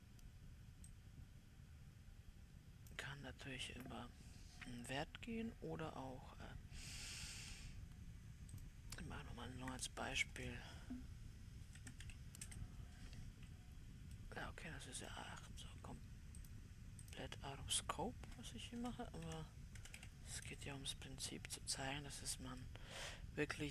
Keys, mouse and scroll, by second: 1.5 click, 9.0-14.6 drag, 14.6-16.9 middle drag, 16.9-23.1 drag, 23.1-23.7 middle drag.